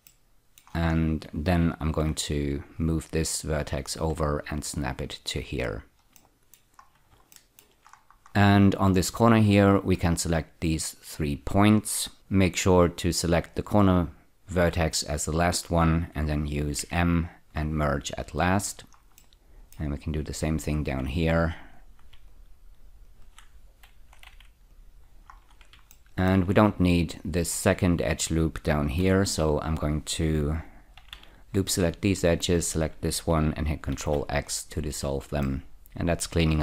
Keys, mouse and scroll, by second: 0.1 middle click, 1.0-2.0 scroll up 1, 2.0 1, 2.8 click, 3.8 click, 5.6-6.2 scroll down 2, 6.2 middle click, 6.8 scroll down 2, 7.4 shift+middle click, 7.9-9.4 scroll up 5, 9.4 click, 10.3 shift+click, 11.0 shift+click, 16.8 m, 18.2 click, 19.2 middle click, 20.7 click, 21.7 click, 22.3 shift+click, 24.3 m, 24.7 click, 25.4-25.9 scroll down 3, 25.9-26.3 shift+middle drag, 29.0 2, 30.3 click, 30.9 ä, 31.1 ä, 32.5 shift+click, 33.9 ctrl+x, 34.6-35.0 scroll down 4, 35.4 middle click.